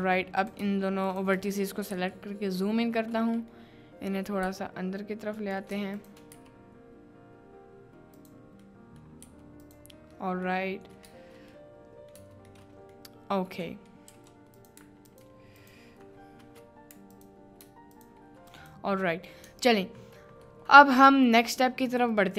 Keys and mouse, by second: 0.4 click, 1.0 shift+click, 1.9 KP_Decimal, 2.7 middle click, 4.4 g, 5.9 shift+click, 6.3 g, 8.2 click, 8.7 middle click, 9.2 g, 9.6 click, 10.1 middle click, 10.6 middle click, 11.1 Tab, 11.6 middle click, 12.2 Tab, 12.6 middle click, 14.1 3, 14.5 click, 17.1 alt+click, 17.9 shift+click, 18.6 click, 19.5 Tab, 20.5 middle drag, 21.5-22.3 middle drag.